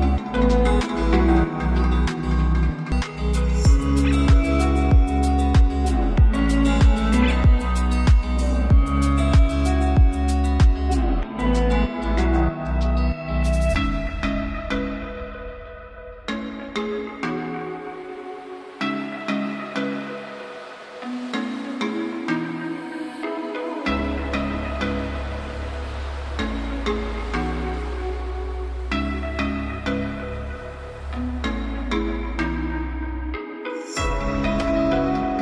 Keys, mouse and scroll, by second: 5.9-7.6 drag, 7.6 space, 13.0 space, 13.8-16.2 drag, 16.2 click, 19.8-21.1 typing, 22.9-26.7 drag, 32.5 click, 34.0 Return.